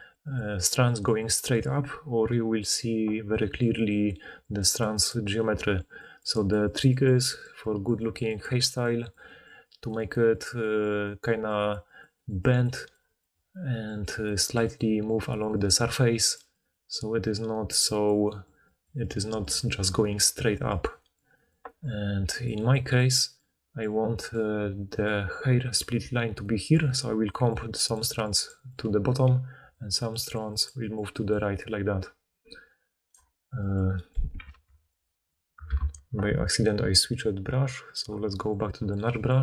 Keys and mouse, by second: 0.5-3.2 right drag, 3.2-31.5 drag, 24.5-31.5 typing, 33.2 d, 34.5 ctrl+z, 35.8 ctrl+z.